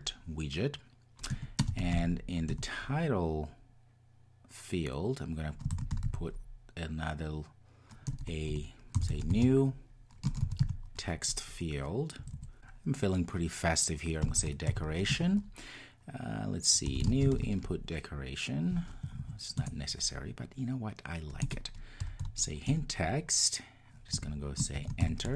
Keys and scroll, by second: 2.6 Return, 15.1 Return, 19.6 Return.